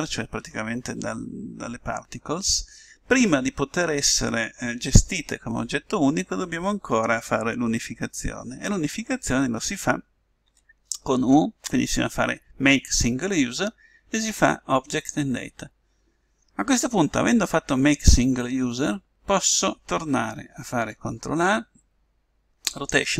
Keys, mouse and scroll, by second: 10.4 u, 21.2 ctrl+a.